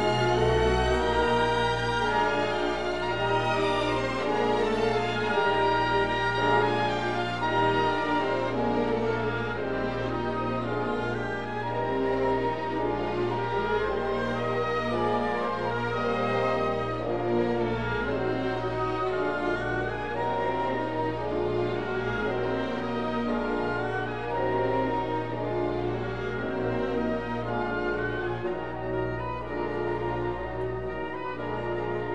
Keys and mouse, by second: 1.0 ctrl+r, 2.9 drag, 3.3 ctrl+r, 5.5 click, 6.2 ctrl+r, 8.9 click, 9.3 ctrl+r, 11.3 click, 12.2 ctrl+r, 14.4 click, 14.8 ctrl+r, 16.8 click, 20.1 Tab, 21.1 click, 24.2-24.9 drag, 25.7 Tab, 26.6 3, 27.8 alt+z, 28.4 KP_3.